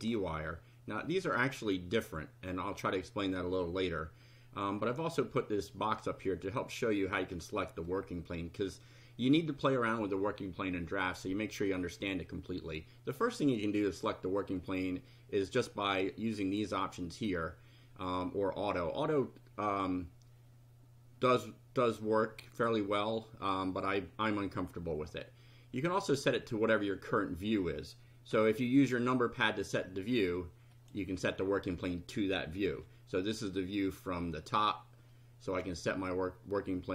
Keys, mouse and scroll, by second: 0.0 click, 4.9 middle click, 7.3-8.0 middle drag, 13.9 click, 28.7 KP_1, 30.7 click, 32.6 KP_2, 35.5 click.